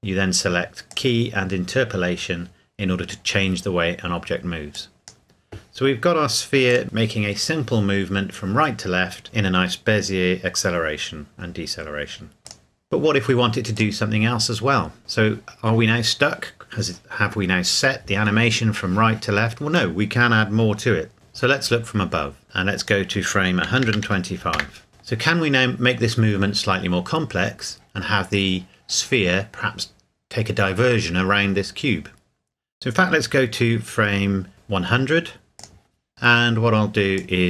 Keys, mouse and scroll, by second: 4.7 click, 12.5 click, 22.8 click, 23.7 KP_1, 23.8 KP_2, 24.0 KP_5, 24.5 KP_Enter, 27.1 scroll down 1, 35.6 click, 36.1 KP_Enter, 37.2 click.